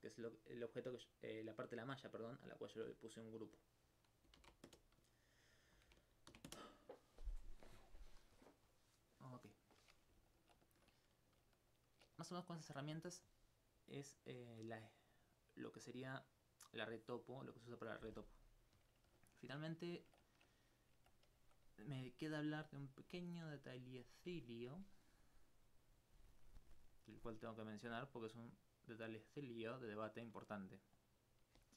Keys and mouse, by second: 3.3 click, 4.3 click, 5.5 click, 5.7 click, 8.4 middle click, 16.8 middle click, 23.2-30.2 alt+drag, 31.0 click.